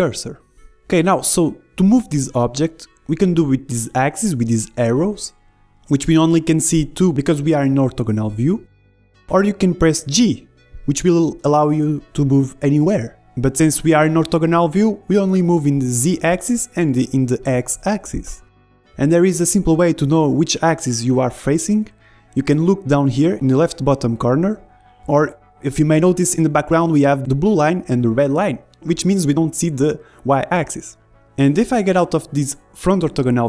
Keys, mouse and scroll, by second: 2.3-4.1 middle drag, 4.8-6.8 drag, 6.6 ctrl+z, 7.4-9.3 drag, 9.0 ctrl+z, 11.8 g, 29.9-32.0 middle drag, 31.4 g.